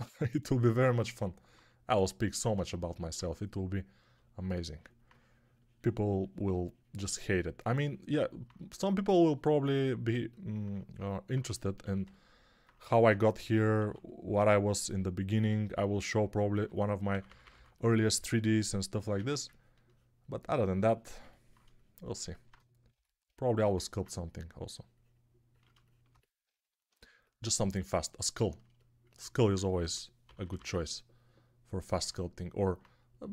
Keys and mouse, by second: 3.1 2, 11.7 1, 12.8 1, 13.7 3, 16.4-17.4 typing, 19.0 1, 29.7 g, 30.1 ], 30.3 ], 30.4 ].